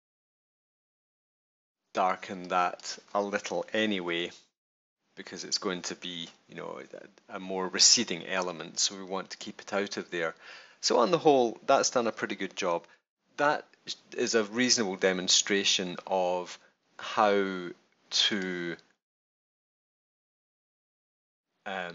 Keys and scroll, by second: 3.7 super+-, 12.4 super+-.